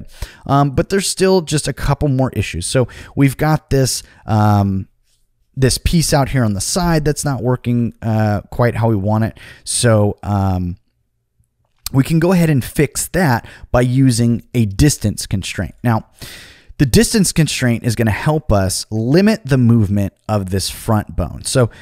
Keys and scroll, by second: 6.9 super+z, 7.3 super+z, 7.6 super+z, 17.9 g.